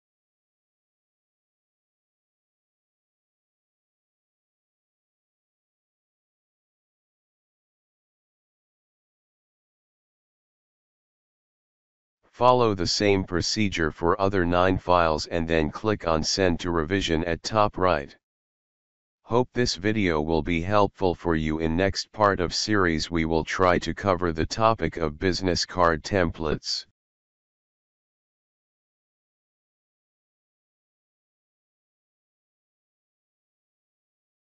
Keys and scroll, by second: 0.3 Return, 1.0-11.8 typing, 1.4 Return, 2.1 Return, 3.8 Return, 4.8 Return, 6.6 Return, 7.4 Return, 9.8 Return, 10.9 Return, 12.1 Return.